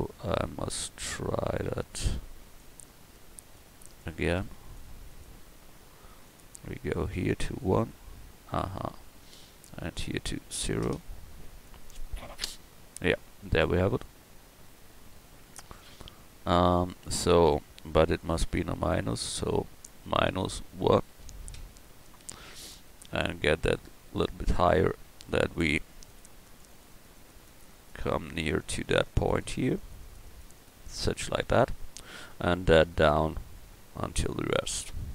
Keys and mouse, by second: 15.5 KP_1, 16.2 KP_1, 33.5-35.1 middle drag.